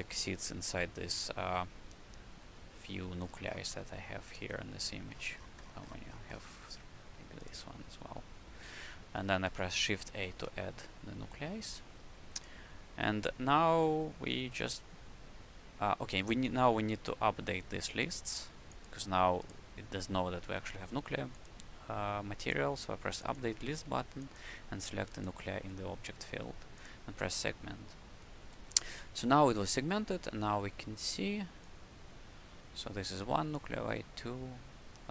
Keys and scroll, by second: 10.3 shift+a, 29.6 alt+a, 31.0 alt+a.